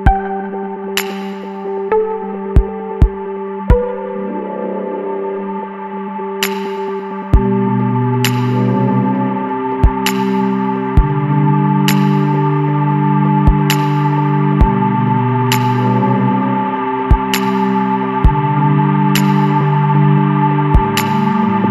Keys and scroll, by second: 6.9 ctrl+space, 8.3 c, 16.8 ctrl+space, 20.3 shift+F2, 21.6 F9.